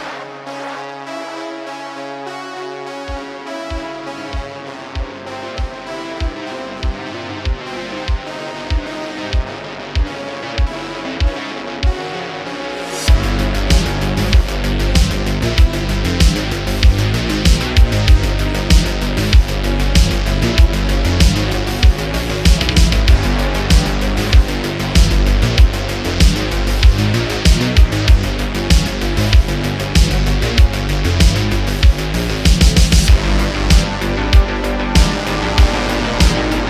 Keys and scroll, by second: 1.3 Tab, 1.8 1, 4.0 p, 4.1 i, 4.2 n, 4.3 1, 4.3 Return, 8.0 Tab, 8.7 Tab, 10.7 Tab, 15.8 space, 20.2 space, 21.0 shift+Left, 23.0 Tab, 23.8 2, 31.0 Tab, 31.7 super+2, 32.7 space, 33.6 Left, 36.3 space.